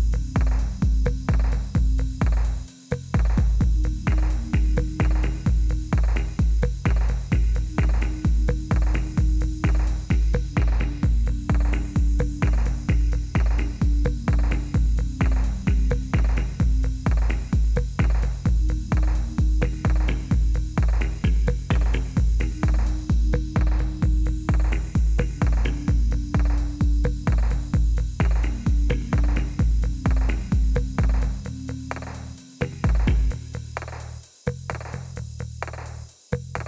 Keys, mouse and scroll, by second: 0.3 click, 0.7 click, 1.1 click, 1.9 click, 2.2 click, 4.0 click, 4.9 click, 5.5 click, 6.1 click, 7.3 click, 7.7 click, 7.8 click, 8.4 click, 9.1 click, 10.8 click, 16.2 click, 17.1 click, 18.7 click, 21.3 click, 21.9 click, 22.7 click, 24.0 click, 25.8 click, 26.1 middle click, 26.2-27.5 middle click, 27.5 click, 29.1 click, 30.9 click, 31.8 click, 33.2 click, 33.7 click, 34.9 click.